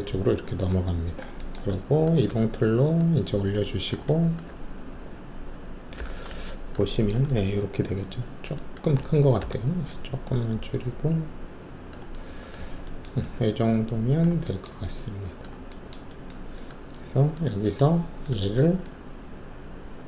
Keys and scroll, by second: 0.2 alt+shift+q, 2.2 w, 5.9 5, 9.4 alt+r.